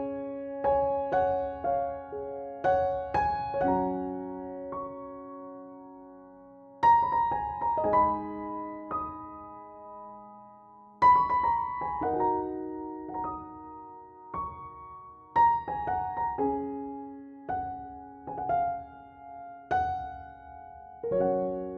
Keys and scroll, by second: 0.6 Tab, 1.3 0, 2.1 Tab, 2.8 0, 3.7 Tab, 8.9 0, 9.2 Tab, 10.0 5, 10.3 0, 11.4 3, 12.6 Tab, 13.8 0, 14.4 Tab, 19.3 f.